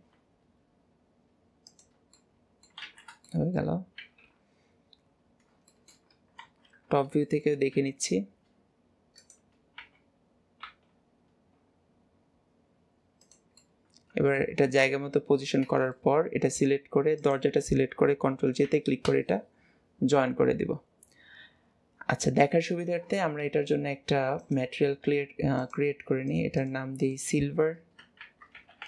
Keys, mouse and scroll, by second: 2.2-2.9 middle drag, 3.3-4.3 middle drag, 5.2-5.8 scroll down 6, 5.8-6.2 shift+middle drag, 7.3-13.6 middle drag, 14.7-16.0 middle drag, 17.2-24.4 middle drag, 24.4-26.4 drag, 26.6-28.8 drag.